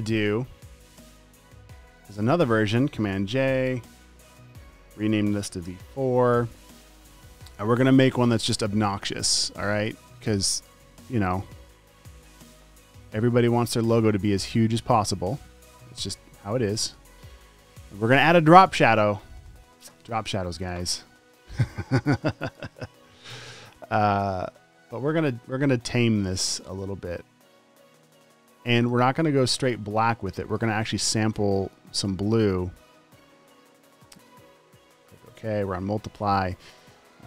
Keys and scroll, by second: 0.7 v, 0.9 space, 3.6 super+j, 4.7 shift+super+r, 5.6 v, 6.2 Return, 7.6 Escape, 12.8 super+t, 15.8 v, 16.2 super+t, 17.8 v, 18.1 space, 18.7 space, 19.3 v.